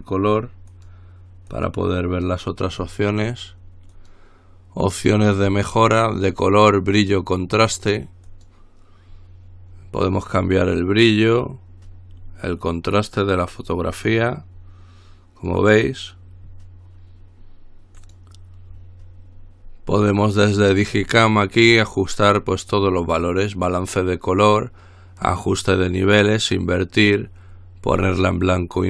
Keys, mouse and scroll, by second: 0.9 click, 1.7 click, 4.1 click, 8.5 click, 11.2-16.2 drag, 18.2 click, 20.2 click.